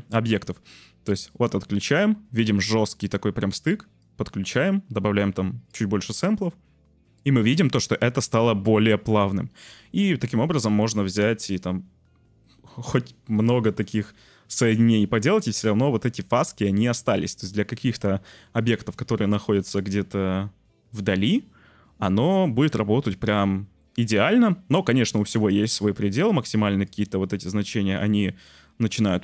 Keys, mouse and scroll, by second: 1.1 drag, 4.0-4.5 drag, 5.7 click, 6.0 click, 9.8 Tab, 11.5 shift+d, 13.3 click, 13.6 Tab, 18.4-19.7 middle drag, 19.7 click, 20.5-21.8 middle drag, 21.8 click, 21.8 middle click, 22.0 click, 22.0 middle click, 22.7 middle click, 23.8 click, 24.0 middle click, 25.5-26.9 shift+drag, 27.7 click.